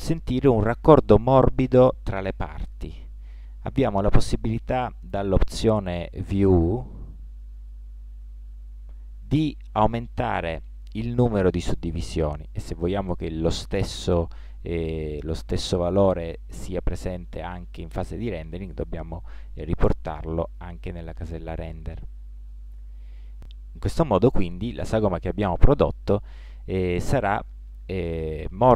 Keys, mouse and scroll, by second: 6.7-22.3 drag.